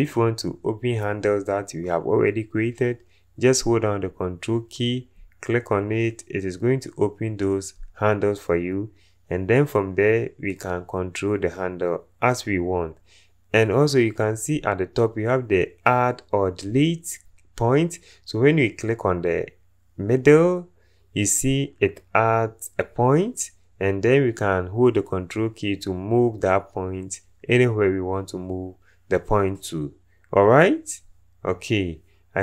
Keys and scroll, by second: 16.3 1, 17.0 1.